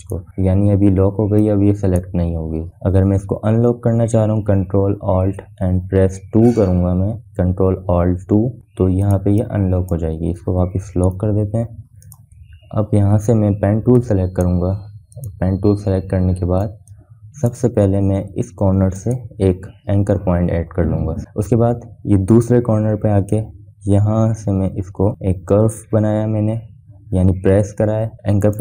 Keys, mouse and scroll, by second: 0.6-6.7 drag, 8.1 ctrl+alt+2, 10.5 click, 10.9-12.6 drag, 12.6 ctrl+z, 13.1 ctrl+2, 13.5 click, 17.2-17.8 scroll up 1, 17.8-18.1 scroll up 1, 18.1 space, 18.4 click, 18.6 space, 20.4 click, 24.8-28.6 drag.